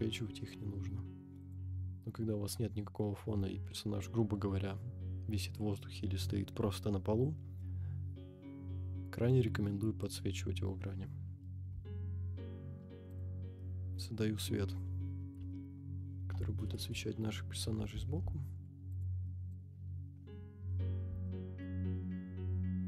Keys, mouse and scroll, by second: 0.1-0.5 middle drag, 0.6 scroll down 1, 1.4-10.3 drag, 11.1-11.6 scroll down 1, 11.6 g, 13.2 click, 13.6-14.1 middle drag, 15.2 r, 15.4 x, 16.1 9, 16.2 0, 16.9 Return, 17.9 g, 18.0 y, 19.0 click, 19.2 middle drag, 20.2 KP_7, 21.2-21.6 shift+middle drag, 22.1 click, 22.1 KP_0.